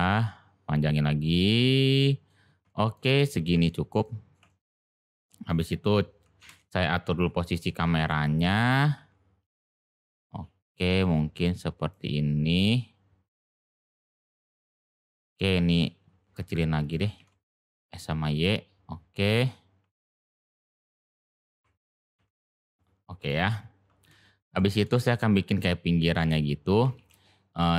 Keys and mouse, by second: 1.3 click, 1.9-2.2 middle drag, 2.6 shift+middle click, 3.1 middle drag, 3.6 shift+middle drag, 4.0 middle drag, 4.4 shift+middle drag, 5.0 middle click, 6.4 ctrl+alt+Return, 7.1 shift+f, 15.0 click, 17.1 ctrl+z, 17.4 s, 20.3 shift+f, 23.2 click, 24.5-24.8 middle drag, 27.0 shift+a.